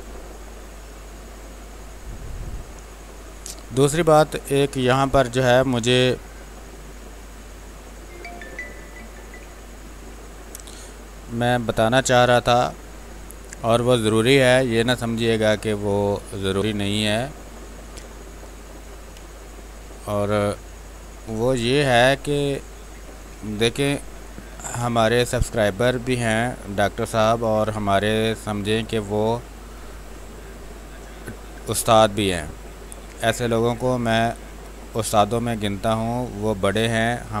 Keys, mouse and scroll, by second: 13.1 space, 15.7 ctrl+click, 17.0-18.8 drag, 18.8 b, 19.1 space, 19.3 click, 19.6 space, 20.6-22.3 drag, 22.3 space, 22.5 click, 22.7 space, 23.4 r, 23.9 click, 25.9 space, 27.9-29.8 drag, 29.8 space, 30.0 click, 30.3 space, 31.6-33.0 drag, 33.0 space, 33.2 click, 33.5 space, 34.4-37.4 drag.